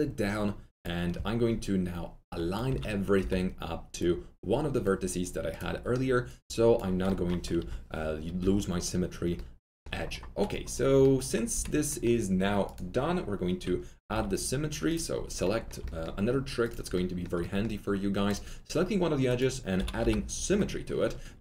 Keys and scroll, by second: 2.6-3.1 typing, 6.7-9.3 typing, 14.1 2, 19.5-20.4 typing.